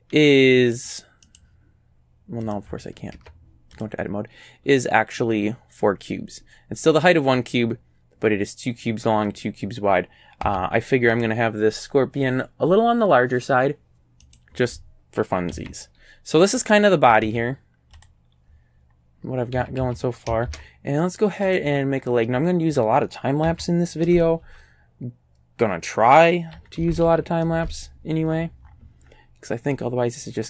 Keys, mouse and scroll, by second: 0.2 scroll down 1, 0.8 right click, 1.3 right click, 2.5 click, 3.2 Tab, 3.8 click, 10.5 Tab, 11.2 click, 14.3 right click, 15.6 a, 16.6 right click, 17.3 Tab, 18.0 click, 18.9-19.4 scroll up 2, 19.6 a, 19.8 a, 21.5 click, 22.3-22.6 scroll down 2, 23.5 s, 24.1 KP_Enter, 24.1 KP_Decimal, 24.5 KP_2, 26.6 s, 26.8 KP_Decimal, 27.1 KP_2, 27.6 KP_Enter, 28.3-29.7 scroll up 4.